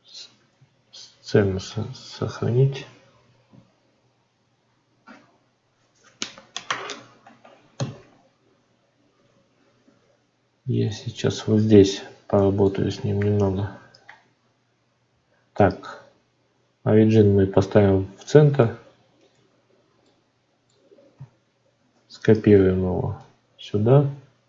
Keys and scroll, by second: 21.7 shift+d.